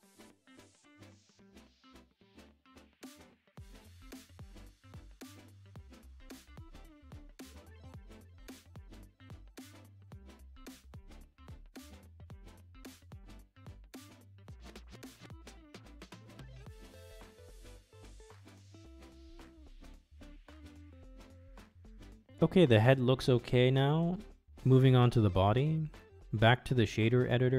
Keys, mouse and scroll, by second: 0.0 middle click, 0.7 middle click, 2.1 ctrl+z, 3.3 middle click, 4.1 ctrl+shift+z, 5.3-6.5 middle drag, 6.5 click, 6.7 middle click, 7.9 shift+click, 8.3 shift+click, 8.7 middle click, 9.9 middle click, 11.1 ctrl+e, 12.7 middle click, 13.9-16.1 middle drag, 16.1 Tab, 16.5-17.1 drag, 17.1-17.8 middle drag, 18.3-19.4 middle drag, 20.4-20.8 middle drag, 21.9 KP_Divide, 22.9 click, 25.4 KP_Divide, 26.2-26.8 shift+middle drag, 27.0-27.5 shift+middle drag.